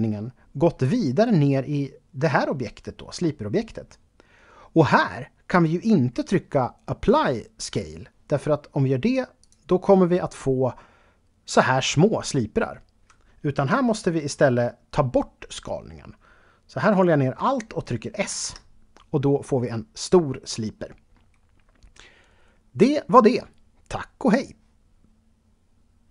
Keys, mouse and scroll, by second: 9.4 click, 18.3 alt+s.